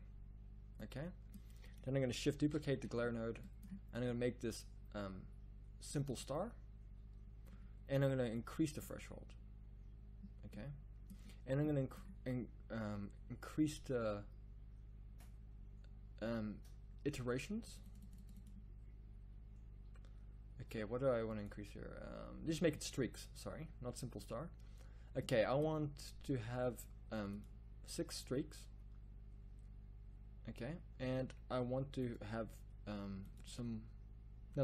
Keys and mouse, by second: 2.8 shift+d.